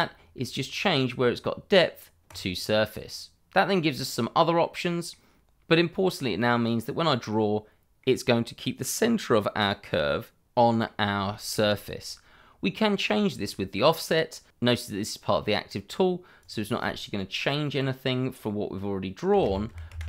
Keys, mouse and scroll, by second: 2.3 click, 4.8 middle click, 5.7 click, 7.3 middle click, 12.4 shift+middle click, 16.4 click, 19.3 KP_0, 19.4 KP_Decimal, 19.6 5, 19.9 Return.